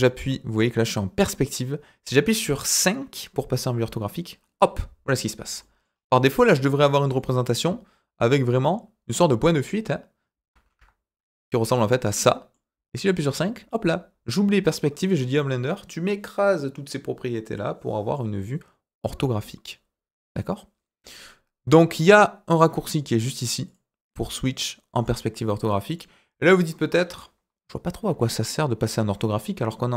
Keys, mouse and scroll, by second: 3.7 KP_5, 5.6 middle click, 5.8-6.3 scroll up 4, 6.8 shift+middle drag, 7.1-8.6 middle drag, 10.7 KP_5, 11.7-12.5 middle drag, 13.2 KP_5, 22.8 click, 23.6 click, 24.3 click, 24.9 click, 25.9-26.4 middle drag, 27.9 KP_1, 29.7 scroll down 2.